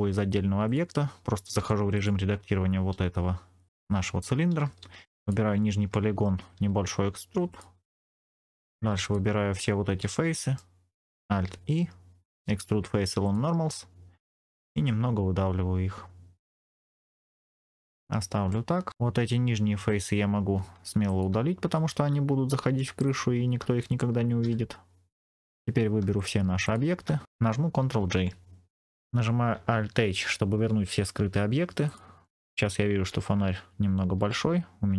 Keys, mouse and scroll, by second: 0.5 click, 1.5 Tab, 1.8 click, 5.1 click, 5.5 middle click, 6.5 e, 7.4 click, 8.9 alt+click, 9.9 middle click, 11.2 alt+e, 16.9 middle click, 16.9 click, 16.9 scroll down 2, 17.6-18.0 scroll up 5, 18.4 middle click, 18.9 Tab, 18.9 click, 19.8 alt+click, 21.0 alt+click, 22.9 shift+click, 24.3 x, 25.4-25.9 scroll down 2, 26.1 shift+click, 26.5 shift+click, 27.9 ctrl+j, 28.9 click, 28.9-29.4 scroll down 3, 31.0-31.7 scroll up 4, 31.7 click, 32.3-32.9 scroll down 2, 34.1 s.